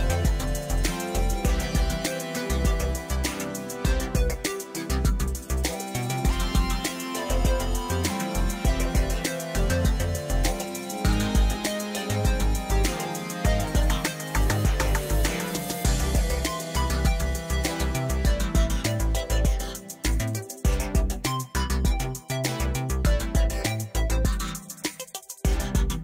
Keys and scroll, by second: 0.7 ctrl+j, 3.8 shift+d, 4.0 shift+z, 6.6 s, 7.0 g, 7.2 shift+z, 8.8 g, 9.0 z, 10.4 alt+a, 16.9 shift+a, 19.1 1, 19.3 Return, 20.0 Tab, 20.7 s, 22.2 Tab, 22.6 g, 22.8 z, 23.9 Tab, 25.8 ctrl+r.